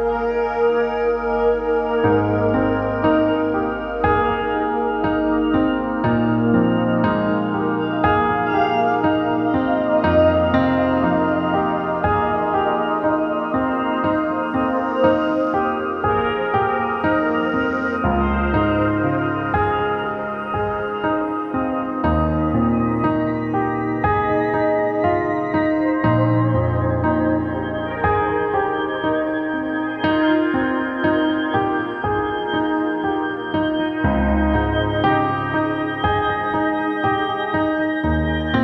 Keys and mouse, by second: 1.7 shift+d, 2.8-4.3 drag, 6.5-8.5 middle drag, 8.5 l, 9.9-11.8 drag, 12.6-14.1 drag, 14.6-19.5 drag, 25.7 click, 28.7-30.5 drag, 30.9 middle click, 31.5 click, 32.8-34.0 drag, 35.1 ctrl+b.